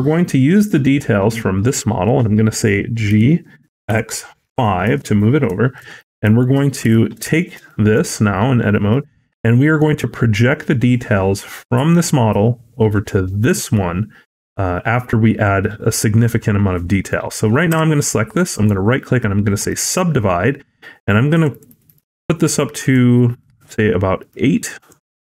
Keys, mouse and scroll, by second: 5.6 shift+middle click, 5.9-6.8 scroll up 4, 6.3 shift+middle click, 6.7 Tab, 7.2 shift+middle click, 7.5 middle click, 8.0-8.5 scroll down 3, 8.4-8.8 scroll up 2, 8.8 middle click, 12.2 scroll down 2, 15.8-17.0 scroll up 4, 17.0 middle click, 17.6 a, 18.4 right click, 21.2-21.6 click, 21.4 click, 21.7 click, 22.7 click, 24.1 click, 24.6 click.